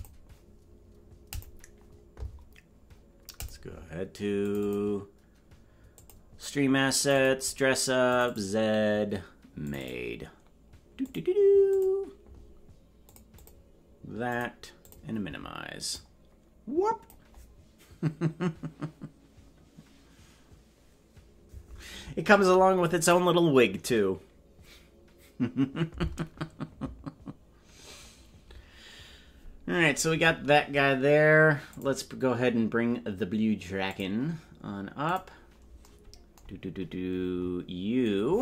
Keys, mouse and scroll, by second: 31.7-33.9 drag, 35.0 click, 36.6-38.4 scroll down 4.